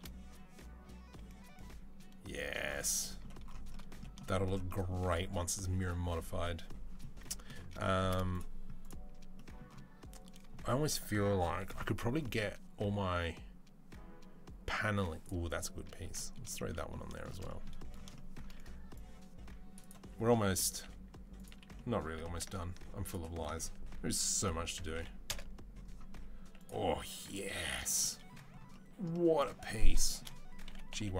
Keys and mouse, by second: 8.1 click, 8.2-8.6 middle drag, 8.6-16.2 drag, 16.2-18.8 shift+middle drag, 18.8 click, 19.6-30.0 middle drag, 20.5 s, 21.9 g, 24.2 s, 26.0 s, 30.4 g.